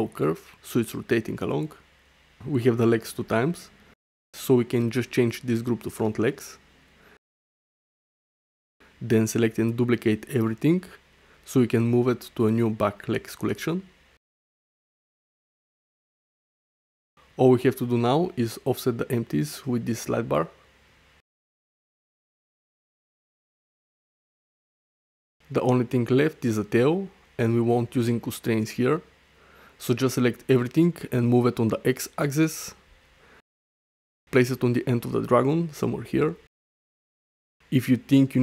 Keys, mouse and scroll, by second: 0.3-0.7 middle drag, 1.2 shift+middle click, 1.5 middle click, 5.2-7.5 drag, 8.5-9.7 right drag, 10.5 shift+d, 11.1 click, 11.9 m, 17.2 middle click, 17.9 shift+middle drag, 18.2-18.6 middle drag, 18.9 shift+middle drag, 20.7-22.3 drag, 22.4 click, 25.2-26.8 drag, 26.9 click, 28.5-29.9 right drag, 30.9 g, 31.1 x, 32.2 click, 34.3 middle click, 34.7 shift+middle click, 35.1 middle click, 36.4 click.